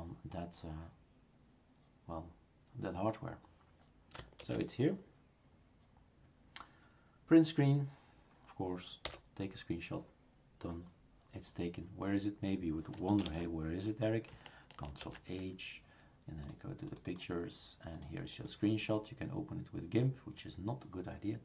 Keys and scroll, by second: 4.4 shift+super+q, 9.0 Print, 13.2 shift+super+Return, 15.0 ctrl+h.